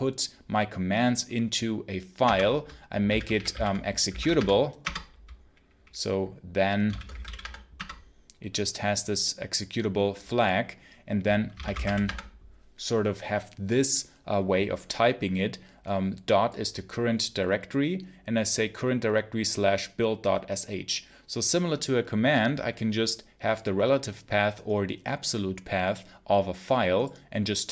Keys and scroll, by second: 2.1 Return, 2.7-4.6 typing, 4.7 Return, 6.5-7.6 typing, 7.6 Return, 11.2-12.2 typing.